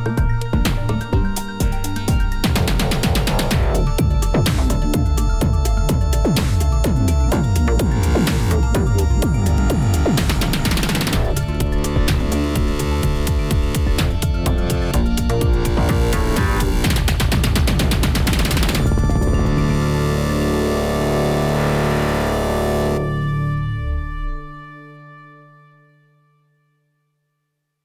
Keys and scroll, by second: 9.0-9.8 typing, 10.3 Return, 19.9 8, 20.8 8, 21.3 4, 21.9 7, 22.8 Return, 24.9 0, 26.5 BackSpace, 27.0 ., 27.3 4, 27.5 5, 27.7 Return.